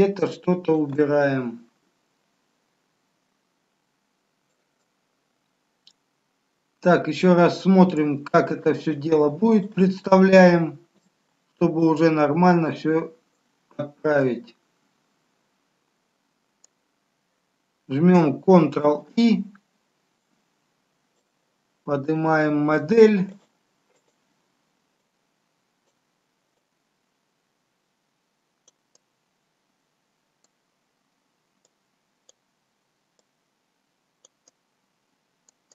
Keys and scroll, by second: 18.7 ctrl+i.